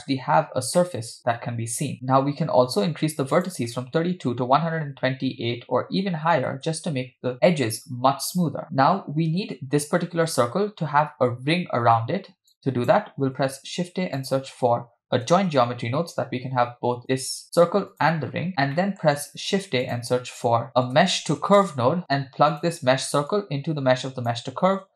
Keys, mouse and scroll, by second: 0.8-1.9 middle drag, 3.7-6.6 drag, 12.5 click, 13.7 shift+a, 18.5 click, 18.8 middle click, 19.2 shift+a, 22.6 click, 23.4-24.3 drag.